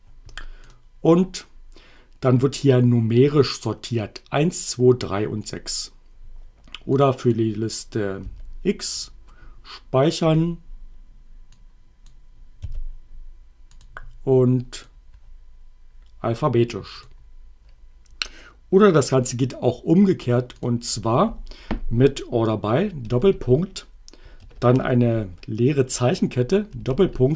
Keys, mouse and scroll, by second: 0.7 click, 7.0 click, 8.3 y, 9.0 click, 11.8 click, 12.7 x, 13.8 click, 14.8 click, 17.1 click, 20.6 click, 23.1 shift+., 26.9-27.3 typing.